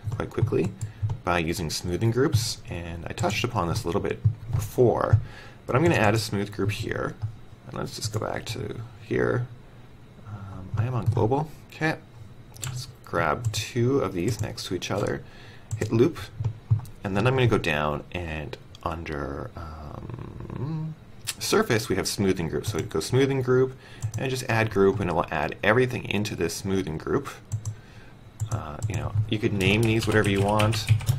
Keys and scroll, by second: 10.6 w.